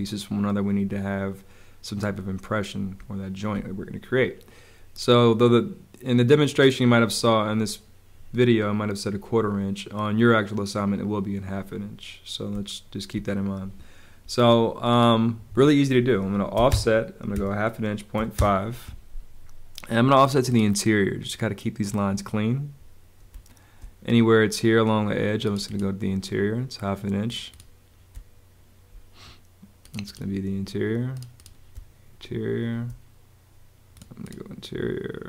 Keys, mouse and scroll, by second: 2.9 space, 12.4 space, 15.3 Escape, 16.5 o, 16.6 Return, 17.3 click, 18.1 5, 18.4 Return, 23.2 space, 28.0 space, 31.7 space.